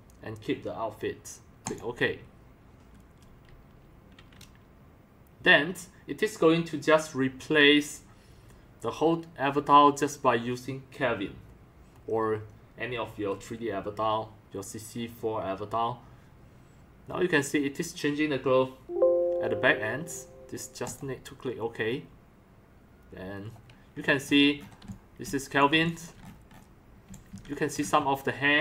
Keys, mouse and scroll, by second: 1.6 click, 21.8 click, 24.0 scroll down 1, 24.8 x, 25.2 c, 25.8 x, 26.3-27.0 scroll up 2, 26.8-27.8 typing, 27.0 click, 27.4-27.8 drag.